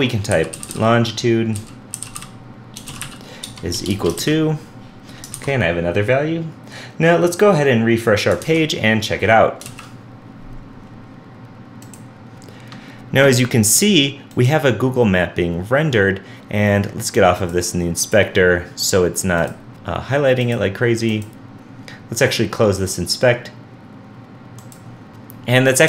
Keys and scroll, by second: 4.2 super+v, 5.4 super+s, 8.4 super+s, 8.5 super+Tab, 9.7 super+r.